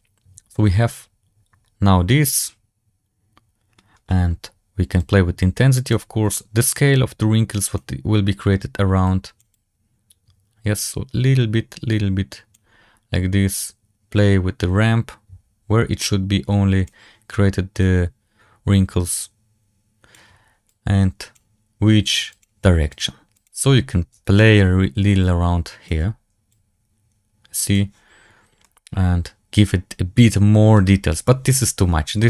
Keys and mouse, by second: 5.2 click, 6.5-7.7 drag, 8.9 click, 9.7-12.4 drag, 13.7-17.0 drag, 18.0-20.0 drag, 20.6 click, 22.4 click, 24.3-25.8 shift+drag, 26.4-27.6 drag, 28.5-30.6 middle drag.